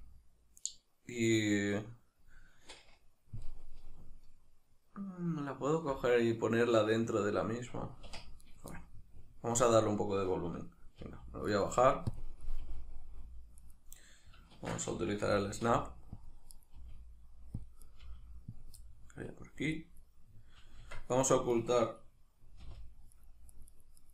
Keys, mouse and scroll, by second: 8.1 middle click, 8.1 1, 8.5 right click, 8.7-11.6 middle drag, 11.0 g, 11.6 right click, 12.1-12.6 drag, 12.6 g, 13.7 right click, 14.6 shift+Tab, 15.3 g, 16.3 click, 16.5 right click, 16.8 g, 17.7 click, 17.9 right click, 18.1 g, 18.6 click, 18.8-19.7 middle drag, 19.7 right click, 20.1-21.1 middle drag, 20.8 Tab, 21.1 right click, 21.7-23.1 middle drag, 22.6 h, 23.1 right click, 23.5 right click, 23.7 right click, 24.0 right click.